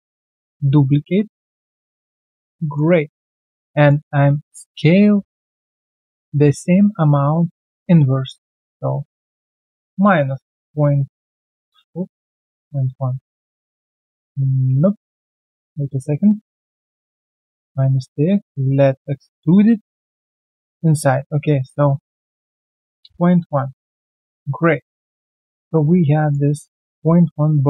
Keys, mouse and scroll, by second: 0.3 ctrl+alt+d, 0.8 alt+scroll down 4, 1.4 alt+middle click, 2.6 alt+middle click, 2.8 alt+right click, 4.6 double click, 5.2 alt+middle click, 5.5 alt+right click, 12.7 Return, 13.8 alt+click, 14.1 alt+middle click, 14.6 ctrl+z, 15.0 ctrl+z, 16.6 ctrl+z, 17.4 double click, 17.9 shift+right click, 22.6-23.0 typing, 23.0 Return, 24.3 alt+right click, 24.6 alt+middle click, 25.0 q, 25.1 right click, 26.6 shift+click, 26.8 shift+double click, 27.1 alt+middle click, 27.5 alt+click.